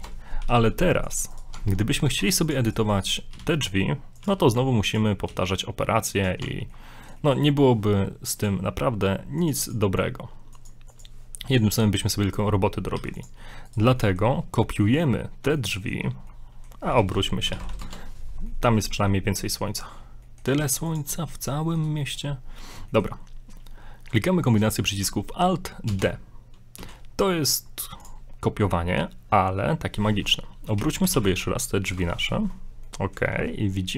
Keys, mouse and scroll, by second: 0.4 g, 1.3 right click, 1.5 Tab, 2.2 ctrl+Tab, 2.7 right click, 3.1 shift+right click, 3.3 e, 4.2 g, 5.3 e, 6.4 Tab, 6.7 middle click, 7.4 shift+middle click, 8.4 click, 11.5 right click, 13.0 x, 13.6 right click, 14.0 right click, 14.1 middle click, 14.9 middle click, 15.6 shift+middle click, 16.3 middle click, 16.9 r, 18.5 middle click, 18.8 shift+middle click, 19.1 scroll up 6, 19.4 middle click, 19.7 shift+middle click, 20.1 scroll down 2, 20.3 middle click, 20.6 ctrl+a, 21.3 shift+middle click, 21.7 middle click, 22.0 shift+middle click, 22.6 middle click, 22.9 shift+middle click, 25.9 alt+d, 30.7 r, 32.9 middle click, 33.3 g.